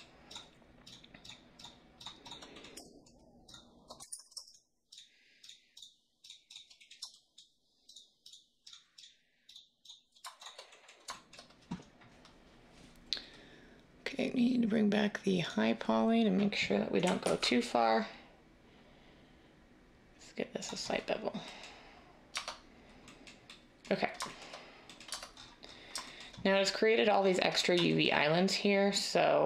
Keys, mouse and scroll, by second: 4.0 ctrl+z, 17.2 ctrl+b, 22.4 Tab, 25.0 Tab.